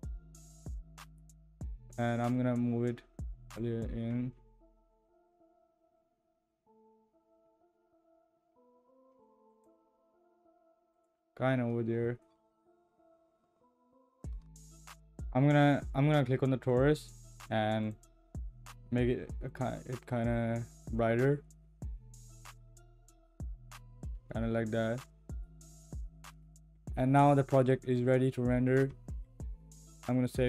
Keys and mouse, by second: 3.5 click, 5.0 g, 12.3 g, 16.7 click, 17.8 click, 29.1 ctrl+s.